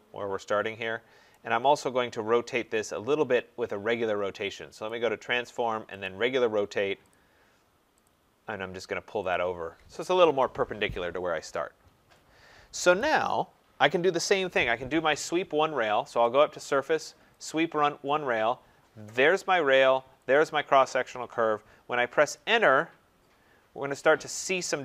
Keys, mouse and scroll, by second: 1.3 right click, 1.5 middle click, 1.6-2.8 scroll, 4.9 click, 6.6 click, 8.0 click, 9.3 click, 10.1 Escape, 10.2 Escape, 13.0 right click, 13.6 scroll, 13.7 middle click, 16.2 click, 17.5 click, 19.3 click, 22.3 Return.